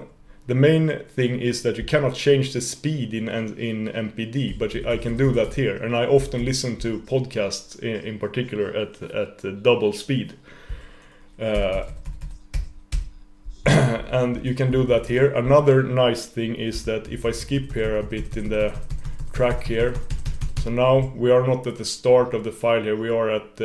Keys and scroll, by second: 4.6 super+=, 11.6 super+-, 14.6 super+=, 17.6 shift+super+}.